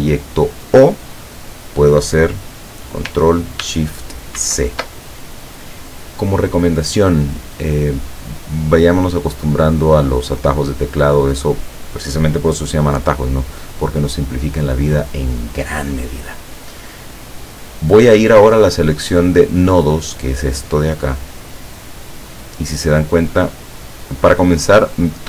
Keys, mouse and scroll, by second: 1.3 click, 4.5 ctrl+shift+c, 22.0 click.